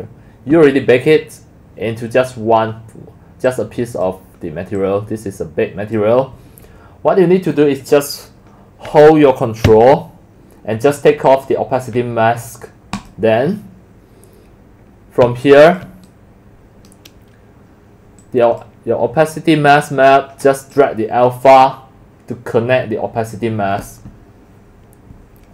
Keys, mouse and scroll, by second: 0.6 click, 1.3 click, 3.5 click, 4.8-6.0 drag, 6.8 middle click, 6.8 scroll up 1, 8.6 drag, 11.2-11.8 ctrl+drag, 13.0 click, 15.5-15.8 ctrl+drag, 16.1 ctrl+click, 18.2 ctrl+click, 20.7-23.3 ctrl+drag.